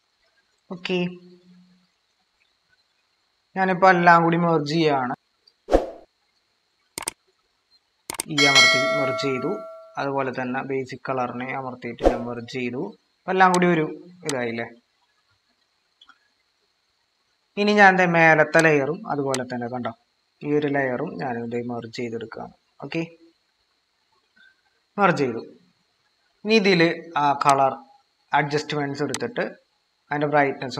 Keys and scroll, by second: 1.8 typing, 1.9 ctrl+-, 7.9 ctrl+e, 11.9 ctrl+e, 15.6 ctrl+-, 16.5 ctrl+-, 16.7 ctrl+=, 24.7 ctrl+e, 25.9 ctrl+=.